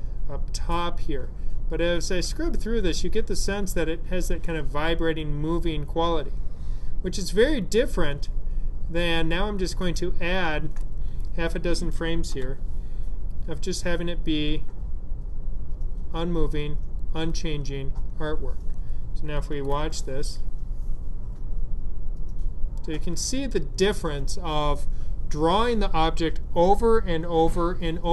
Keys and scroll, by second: 12.2 F5.